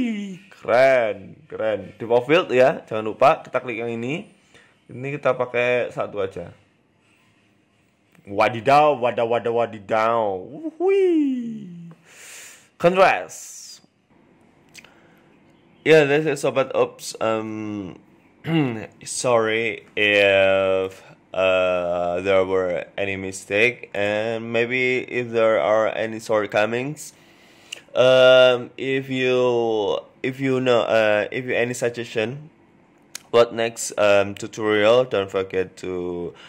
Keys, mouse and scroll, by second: 0.7-1.0 scroll down 2, 1.0 click, 1.5 click, 2.9-3.2 scroll up 2, 3.2 shift+middle click, 4.1 click, 8.1-8.6 scroll down 1, 8.6-9.3 scroll down 2, 8.9-10.2 scroll up 3, 10.2 shift+middle click, 14.0 F12, 17.8 z, 21.4 ctrl+s.